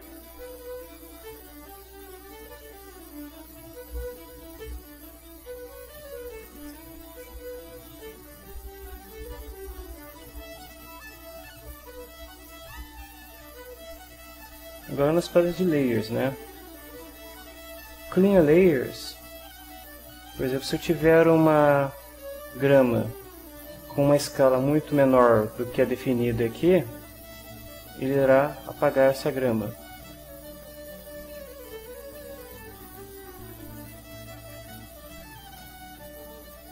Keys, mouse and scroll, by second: 0.0 3, 0.1 Return, 1.2-3.0 drag, 3.0-4.5 right drag, 6.7 ctrl+middle click, 7.4 ctrl+middle click, 8.2-13.4 right drag, 20.4 ctrl+middle click, 21.2 ctrl+middle click, 25.9-27.4 drag, 28.5 right click, 29.6 right click, 30.6 click, 31.9-34.4 drag, 34.6 BackSpace, 34.8 1, 36.0 click.